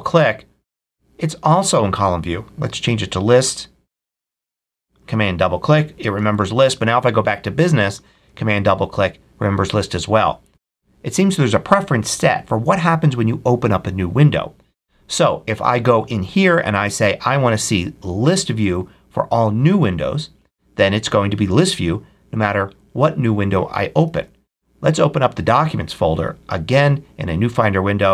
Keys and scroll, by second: 6.1 super+w, 24.0 super+w.